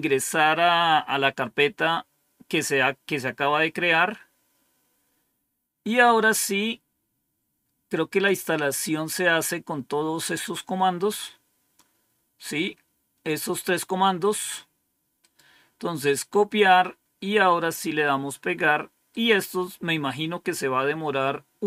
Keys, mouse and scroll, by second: 5.8-8.2 drag, 10.7-11.2 scroll down 2, 12.0-12.5 scroll down 2, 12.5 scroll up 2, 15.1 right click, 16.4 click, 19.0 right click.